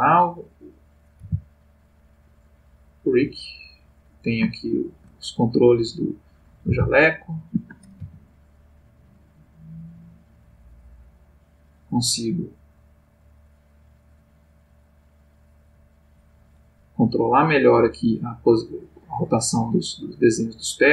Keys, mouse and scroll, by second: 0.7 click, 1.2 r, 2.4 click, 3.5 click, 4.5-5.2 shift+middle drag, 6.0 click, 6.7 r, 7.5 Escape, 8.0 g, 10.2 click, 11.2 click, 12.5-16.6 drag, 17.2 click, 18.7 click, 20.0-20.9 drag.